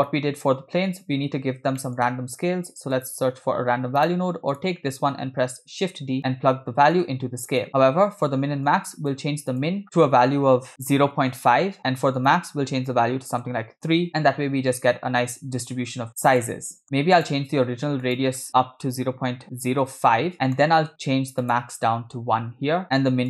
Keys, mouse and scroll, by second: 1.9 middle click, 2.4 shift+a, 4.6 click, 5.5 shift+d, 7.0-7.7 drag, 7.7 middle click, 7.8 scroll up 2, 8.7-10.0 shift+drag, 10.7 click, 12.2-13.4 drag, 16.4 middle click, 16.8 scroll up 1, 17.2-20.0 drag, 20.6 middle click, 21.5-22.8 drag, 22.8 middle click.